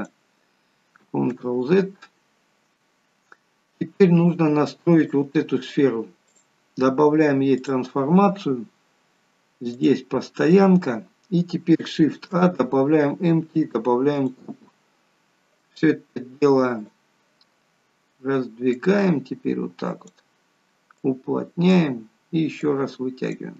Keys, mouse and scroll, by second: 1.5 ctrl+z, 3.8-4.4 scroll up 1, 5.0 click, 6.4 click, 9.9 click, 11.1-11.8 scroll down 2, 12.1-12.4 scroll down 2, 12.1 shift+a, 16.9 click, 18.8 click, 21.1 click, 22.6 click.